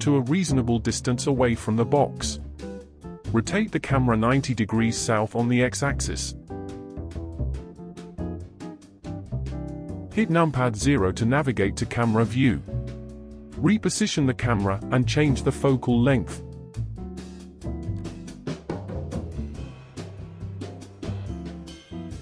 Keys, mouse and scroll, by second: 1.1-2.1 scroll down 3, 2.1-3.8 middle drag, 3.8 r, 6.8-7.8 scroll up 2, 7.8 KP_0, 11.0 g, 16.6 click, 17.9-22.2 drag.